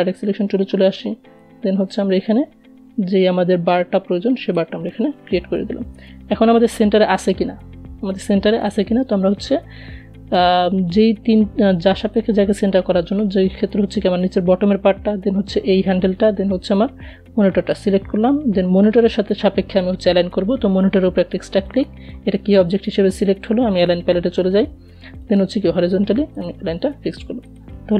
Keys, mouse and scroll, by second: 4.1 v, 4.7-20.0 drag, 23.5 click, 24.7-27.9 drag.